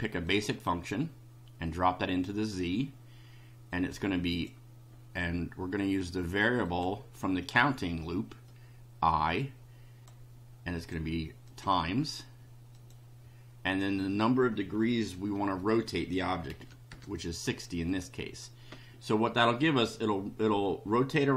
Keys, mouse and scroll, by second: 0.3-2.4 drag, 3.7 click, 4.3 click, 6.6 click, 8.5-10.2 drag, 10.8 click, 11.5 click, 12.7 click, 13.6 click, 16.5 6, 16.9 0, 17.9 click.